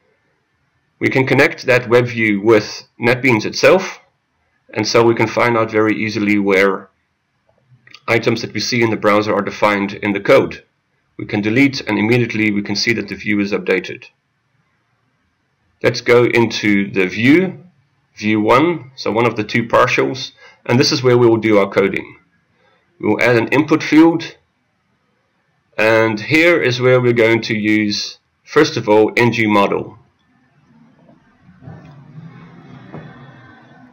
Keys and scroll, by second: 5.4 ctrl+e, 17.2 ctrl+a.